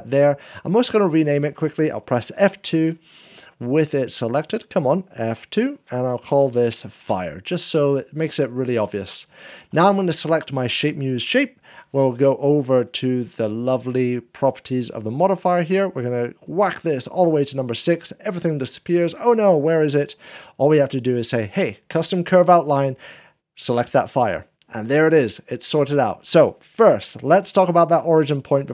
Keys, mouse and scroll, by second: 0.4 Return, 0.5 click, 2.3 F1, 3.7 click, 5.2 F2, 6.2-7.4 typing, 6.4 F2, 6.6 F2, 7.4 Return, 8.3 scroll down 1, 8.7 shift+click, 9.0 shift+middle click, 9.6-11.3 drag, 11.4 shift+click, 11.4 shift+middle click, 11.8-24.1 drag, 14.2 scroll down 1, 15.1-16.5 scroll up 1, 16.5-17.4 scroll down 1, 19.5 scroll down 2, 19.7 scroll up 1, 26.9 scroll down 1, 27.1 KP_7, 27.7 click, 27.7 scroll down 2, 28.2-28.7 shift+drag, 28.4 shift+middle click, 28.4 7.